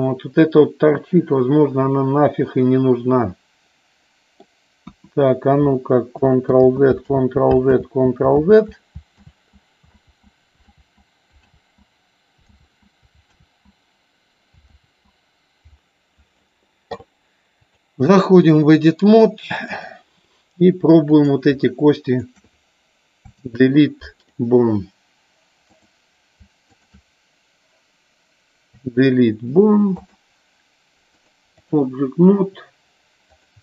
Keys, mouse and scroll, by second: 0.6 scroll down 1, 1.0-4.5 middle drag, 5.0 KP_1, 6.8 ctrl+z, 7.4 ctrl+z, 8.0 ctrl+z, 8.6 ctrl+z, 9.5 ctrl+z, 10.3 ctrl+z, 11.0 ctrl+z, 12.7 ctrl+z, 13.6 ctrl+z, 15.0 ctrl+z, 17.7 click, 19.9 click, 21.2 click, 22.2 shift+click, 23.4 Delete, 25.8 click, 26.8 shift+click, 28.9 Delete, 31.3 click.